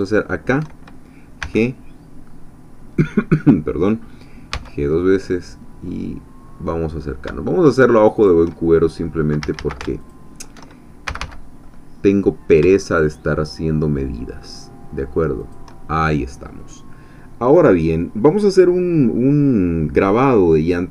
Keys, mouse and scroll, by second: 1.4 g, 4.6 g, 8.2 shift+click, 9.4 a, 10.0 alt+shift+click, 11.1 shift+g, 15.4 shift+click.